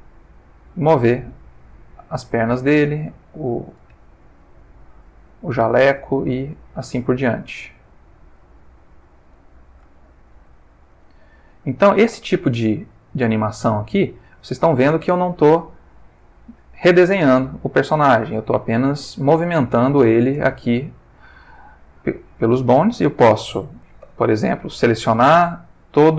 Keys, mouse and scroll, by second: 1.5 click, 2.7 click, 2.9 g, 3.9 Escape, 4.6 click, 5.2 g, 6.8 click, 7.1 s, 7.9 g, 8.9 click, 10.0 shift+middle click, 10.9 click, 11.6 r, 12.7 click, 13.3 click, 13.5 g, 14.4 Escape, 15.0 r, 16.2 click, 18.1 ctrl+middle click, 19.5 shift+middle click, 22.7 a, 24.1 i.